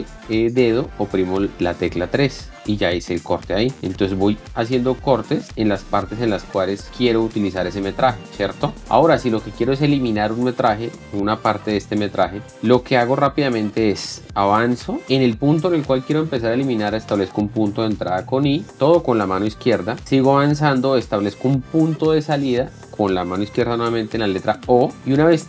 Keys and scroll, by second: 2.7 l, 3.8 k, 4.1 KP_3, 4.4 l, 5.5-8.7 typing, 12.5 k, 14.0 l, 18.7 k, 19.8-20.7 typing, 24.5-25.4 typing.